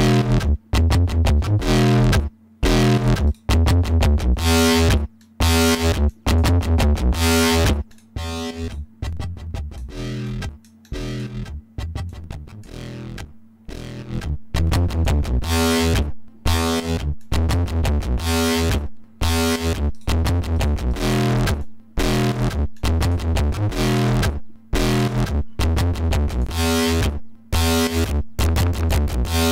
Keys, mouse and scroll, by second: 3.0 middle click, 3.3 middle click, 3.9 click, 5.2 click, 6.1 click, 7.9 click, 8.6 right click, 9.0 click, 10.3-11.4 drag, 12.1 click, 14.3 click, 16.5 click, 17.2 click, 18.5 click, 19.9 right click, 20.6 right click, 20.9 right click, 21.6 click, 22.4 right click, 22.8 click, 23.9 click, 25.0 right click, 26.3 click, 27.0-29.1 drag.